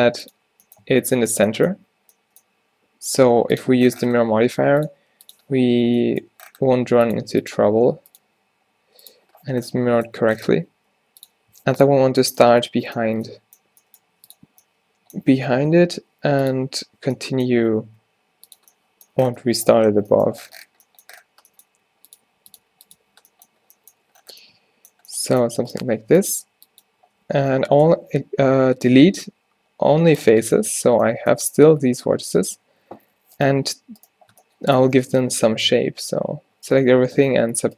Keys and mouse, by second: 0.9 Tab, 1.4 Tab, 3.1 g, 4.4-7.2 typing, 10.9 g, 11.6 s, 12.2 z, 13.9 g, 14.6 z, 15.5 s, 17.0 z, 17.8 r, 21.8 r, 22.3 g, 22.7 r, 23.2 z, 26.6 r, 28.0 x, 31.0 a, 31.6 -, 32.2 z, 35.8 a, 35.9 a, 36.3 w, 37.3 alt+w.